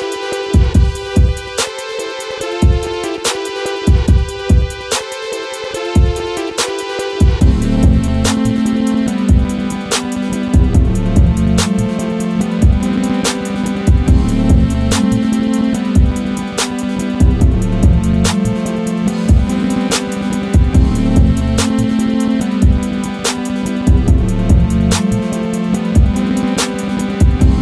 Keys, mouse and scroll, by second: 0.0 scroll up 1, 0.5 click, 1.3 scroll down 1, 2.2 shift+Page_Up, 4.0 click, 8.0 scroll up 1, 12.0-14.3 drag, 14.3 scroll down 1, 14.7 scroll up 1, 16.0 click, 17.2 scroll down 1, 17.5-24.2 drag, 24.2 click, 25.3-25.8 scroll down 1, 27.1 scroll up 1.